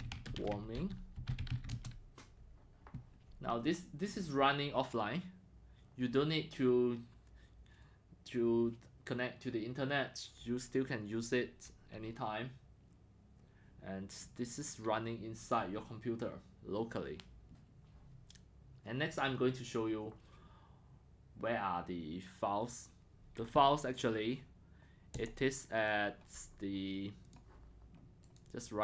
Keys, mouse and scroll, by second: 0.0-2.0 typing, 25.2-26.3 drag, 28.4 click.